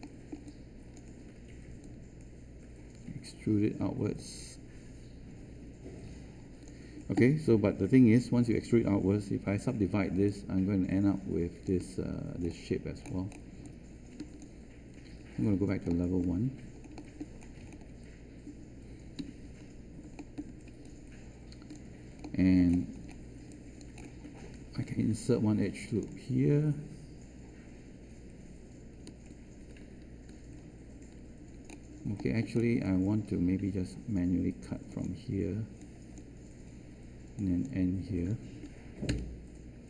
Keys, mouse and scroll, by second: 9.5 3, 15.1 1, 19.1 q, 39.0 Return.